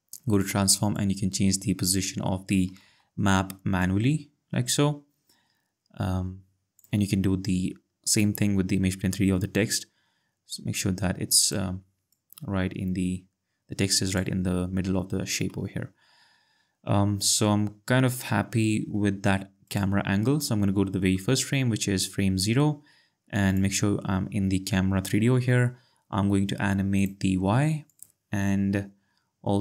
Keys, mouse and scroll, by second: 0.3 click, 2.9 ctrl+z, 3.8 click, 8.1 click, 10.7 click, 11.7 ctrl+z, 12.2 click, 19.7 click, 23.5 click, 27.0 right click, 27.9 click.